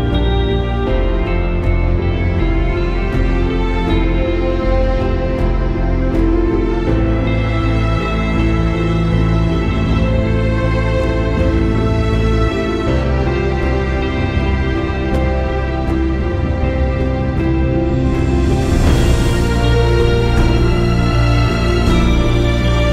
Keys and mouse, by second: 6.9 click, 7.9 alt+click, 12.4 click, 14.6 alt+shift+click, 16.9 u, 18.1 click, 18.6 space, 18.8 click.